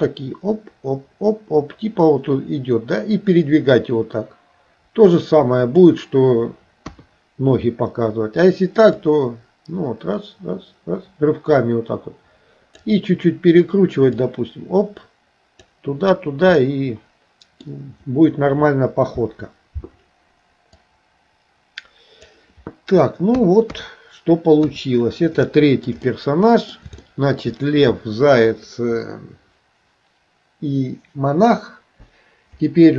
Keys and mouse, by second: 0.2-5.9 drag, 6.9 KP_3, 9.2-13.0 drag, 14.3-15.7 drag, 16.6-17.7 middle drag, 20.9-22.4 drag, 23.4 KP_2, 23.7 KP_3, 24.7 KP_1, 25.5 shift+middle click, 26.0 middle click, 27.1 shift+middle click.